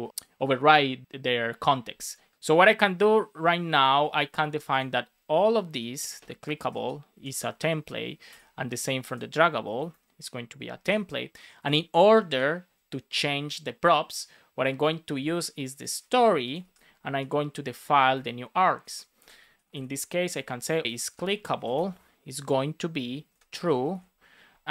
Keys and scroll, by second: 4.1 super+c, 6.4 shift+super+Right, 6.7 super+v, 7.0 Down, 7.4 super+space, 7.5 super+Right, 8.2 Escape, 9.5 Right, 10.7 super+v, 12.0 Return, 12.5 Up, 16.0 super+c, 16.5 super+v, 18.0 Return, 18.7 space, 19.4 shift+[, 20.3 shift+c, 23.1 shift+;, 23.2 shift+space.